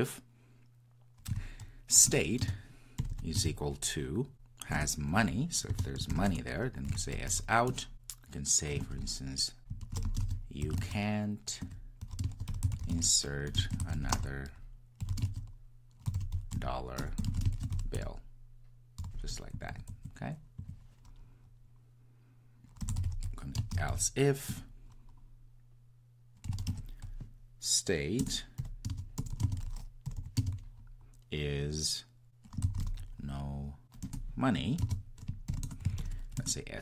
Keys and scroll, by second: 2.1 Return, 4.8 Return, 24.5 Return, 34.0 Return.